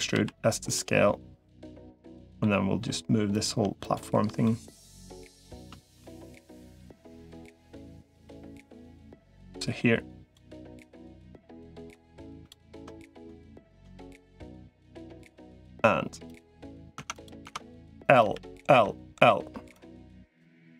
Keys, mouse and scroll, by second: 1.7 middle click, 3.1 click, 3.7 shift+click, 4.2 middle click, 5.8-6.9 middle drag, 7.7 shift+click, 8.4 middle click, 9.3 click, 10.5 middle click, 11.2 middle click, 14.3 click, 15.1 middle click, 16.1 click, 16.9 Tab, 17.3 Tab, 18.1 l, 18.5 l, 18.9 l, 19.5 click.